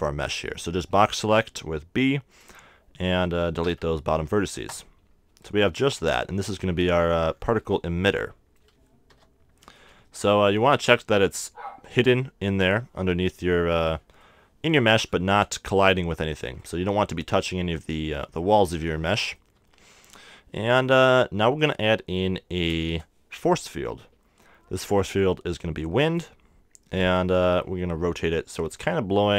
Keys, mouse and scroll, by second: 3.6 x, 5.3 a, 5.6 Tab, 6.0-7.3 middle drag, 9.1 KP_0, 10.0 z, 14.2-19.0 middle drag, 19.5 KP_1, 20.0 KP_3, 21.6-23.4 drag, 22.7 shift+a, 29.0 r.